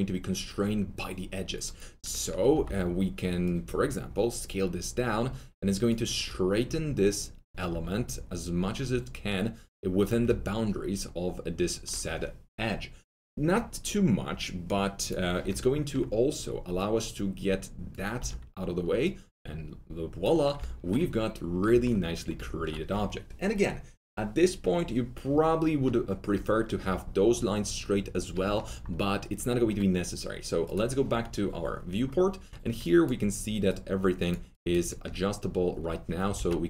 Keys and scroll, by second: 2.5 r, 18.1 w, 32.4 1, 36.3 ctrl+z.